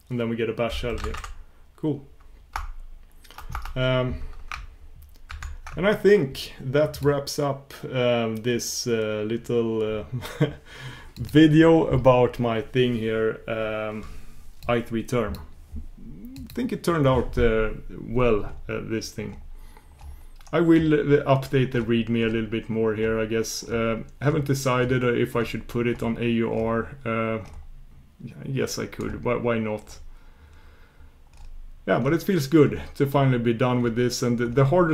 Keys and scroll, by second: 14.9 shift+super+q.